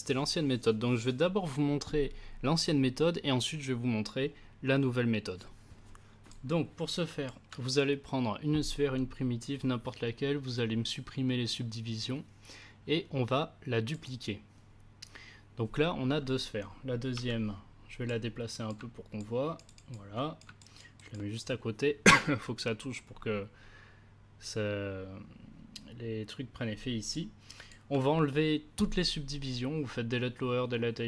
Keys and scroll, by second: 17.1 w.